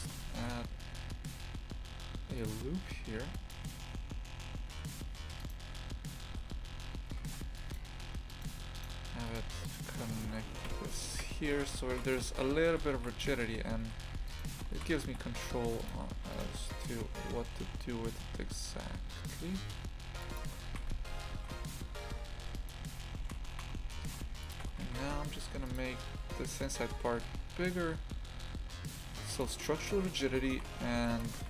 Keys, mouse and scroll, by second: 0.1 a, 0.3 ctrl+r, 4.7 1, 5.4 right click, 6.3 g, 7.9 2, 8.3 right click, 9.3 shift+right click, 9.6 shift+right click, 10.1 shift+right click, 10.6 f, 11.2 Tab, 11.5 shift+f, 12.2 a, 12.7 shift+f, 13.3 Tab, 13.8 a, 14.3 alt+shift+right click, 14.7 shift+f, 16.3 shift+right click, 16.8 g, 20.4 Tab, 20.7 shift+f, 24.6 Tab, 24.9 shift+f, 25.8 3, 26.6 right click, 27.2 g, 30.3 Tab, 30.5 shift+f.